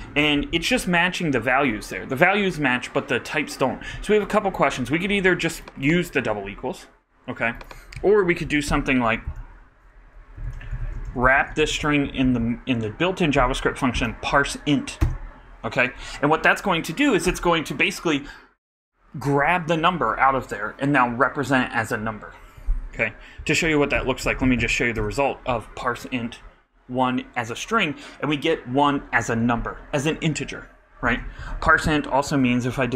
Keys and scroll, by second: 9.2 super+Up, 9.2 super+Left, 10.7-12.1 typing, 12.8 shift+Right, 13.3 shift+0, 13.9 shift+super+Right, 14.5 super+Right, 15.0 super+Return, 23.8 alt+Up, 23.9 alt+BackSpace.